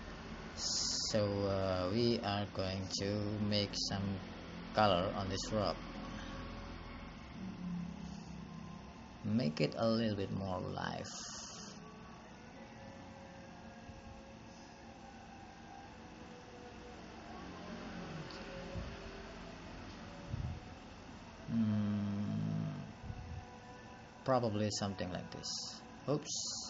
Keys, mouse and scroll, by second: 0.2 click, 1.1-1.6 scroll up 5, 1.6 scroll down 2, 2.3 shift+middle click, 2.7 scroll up 2, 7.2 ctrl+z, 26.2 ctrl+z.